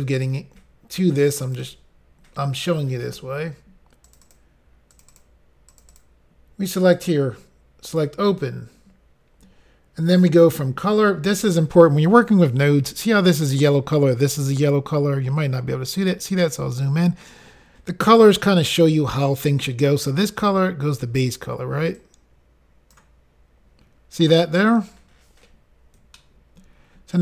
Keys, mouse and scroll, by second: 1.4 click, 1.5 click, 1.6 click, 1.7 click, 4.0 click, 4.2 click, 4.9 click, 5.1 click, 5.7 click, 5.9 click, 6.9 click, 7.0 click, 7.9 click, 15.2 scroll up 3, 16.4 middle click, 17.3 scroll up 1, 22.0 click, 24.7-26.0 scroll up 2.